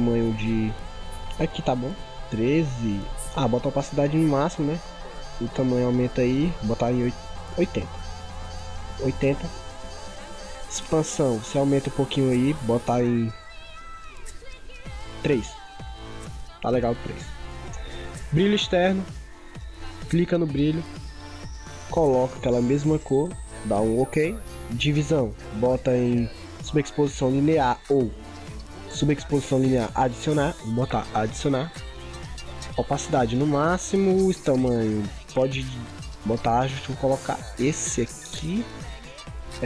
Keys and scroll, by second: 22.2 ctrl+v.